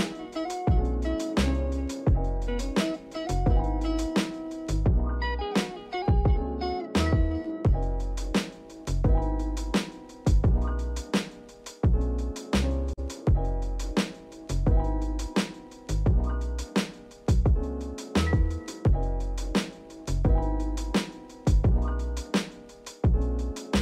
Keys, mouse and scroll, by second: 7.5-8.9 drag, 8.9-9.5 shift+middle drag, 9.5 click, 10.8-14.0 drag, 16.4 click, 17.1 click, 18.2 click, 19.0-21.4 drag, 22.4-23.7 drag.